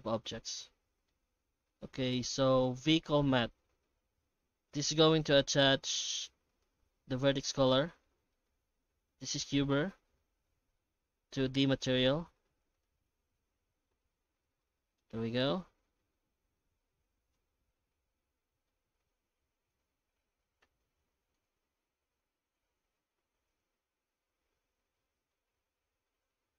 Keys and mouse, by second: 0.6 shift+middle click, 1.4 alt+x, 6.8 click, 8.3 middle click, 14.6-15.0 middle drag, 15.6-18.2 middle drag, 18.7 middle click, 24.9-26.0 middle drag, 26.1 shift+middle click.